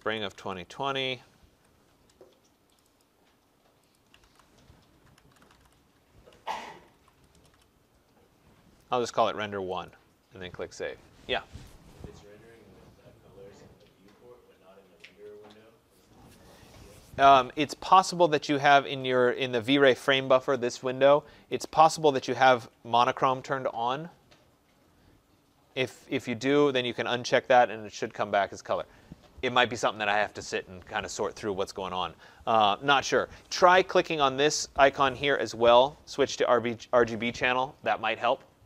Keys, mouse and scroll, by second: 0.0-1.5 typing, 2.7 click, 2.9 click, 3.8-7.4 typing, 3.9 click, 13.4 click, 19.9 click, 22.3 click, 26.6 click, 36.2 click.